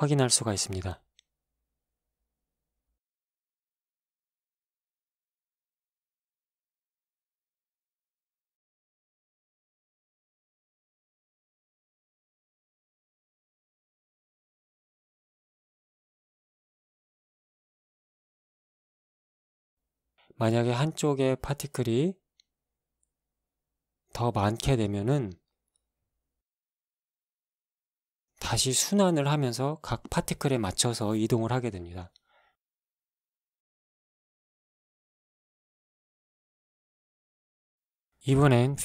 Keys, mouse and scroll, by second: 3.2 alt+a, 4.5 shift+Left, 6.4 right click, 7.6-7.9 scroll down 1, 9.2-10.2 drag, 10.2 KP_Decimal, 10.4 KP_5, 10.7 Return, 14.0 alt+a, 18.6 Escape, 19.2-22.1 scroll down 2, 22.1 right click, 23.3-23.9 scroll up 2, 25.5 click, 26.2 KP_1, 26.4 KP_0, 26.6 KP_0, 27.7 Return, 29.0 alt+a, 30.1 Escape, 30.9-32.5 scroll down 2, 33.1 click, 33.8 alt+a, 38.4 Escape.